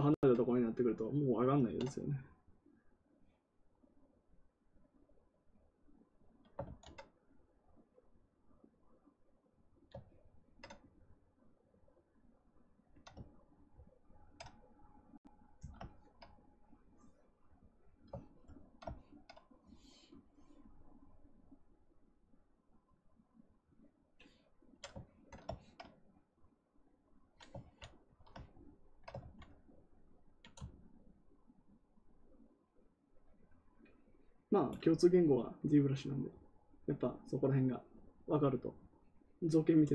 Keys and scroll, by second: 6.6 ctrl+z, 27.5 ctrl+z, 29.1 ctrl+z.